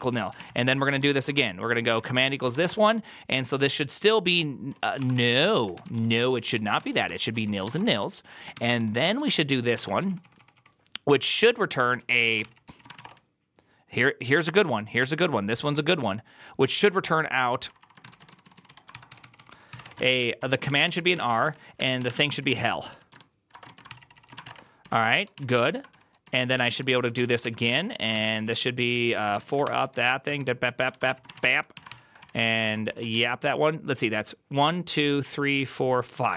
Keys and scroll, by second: 0.0-1.0 typing, 1.8 Tab, 2.1 ctrl+c, 2.1-3.5 typing, 4.6 Tab, 4.8-10.4 typing, 11.9 ctrl+a, 11.9-13.3 typing, 12.0 ctrl+a, 12.3 ctrl+c, 12.4 ctrl+c, 17.8-33.5 typing, 23.7 ctrl+c, 27.3 ctrl+c.